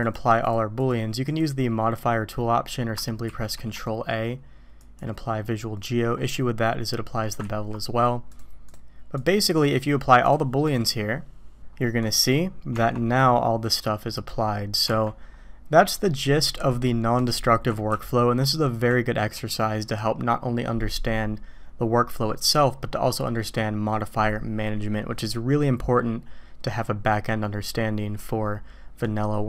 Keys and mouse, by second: 0.1 click, 0.8-1.4 drag, 3.2 ctrl+a, 7.4 ctrl+z, 8.3-8.7 drag, 9.2-9.6 drag, 10.3 click, 12.0 middle drag, 12.7 Tab, 13.1 click, 14.8 Tab, 17.9-18.8 ctrl+z, 19.3 ctrl+z.